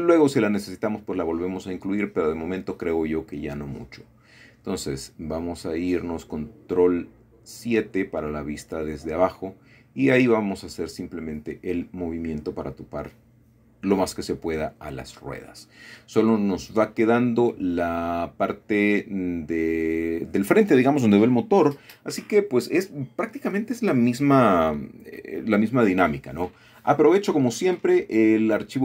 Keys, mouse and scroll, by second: 1.0 click, 1.4 Tab, 2.1-2.7 scroll up 1, 4.7 g, 6.6 click, 7.5 click, 8.4 g, 11.0 click, 11.4-12.8 scroll down 1, 12.2 middle click, 13.7 middle click, 14.6 middle click, 15.9 middle click, 16.2-16.6 scroll up 2, 16.8-18.0 shift+middle drag, 19.6 click, 21.1 shift+click, 21.8 middle click, 24.7 middle click, 25.8 shift+middle click, 26.2 shift+click, 28.1 f.